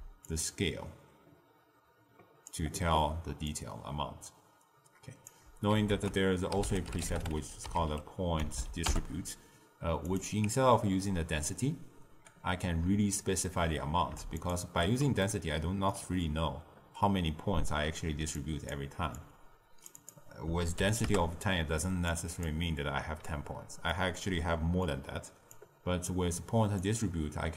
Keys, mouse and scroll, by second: 0.2-3.2 shift+drag, 3.4-5.8 shift+drag, 5.8 ctrl+a, 8.5 Down, 14.3 alt+shift+click, 15.1-18.2 ctrl+middle drag, 18.3 click, 19.1-22.1 drag, 23.8-25.4 middle drag, 25.4 click, 26.7 click.